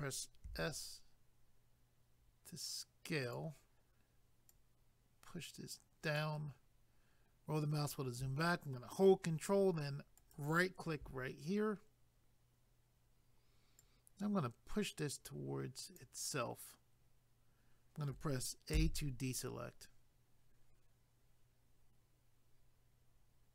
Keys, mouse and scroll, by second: 0.5 s, 3.2 click, 4.5 click, 6.6 scroll down 1, 10.2 ctrl+right click, 13.8 click, 18.7 a.